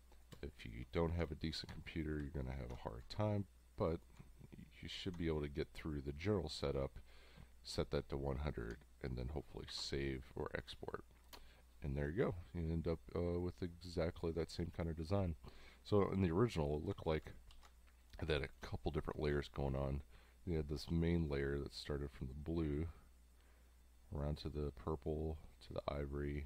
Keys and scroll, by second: 0.3 space, 1.3 space, 2.5 ctrl+alt+2, 9.7 ctrl+3, 10.7 space, 17.5 ctrl+alt+3, 18.3 space, 19.3 space.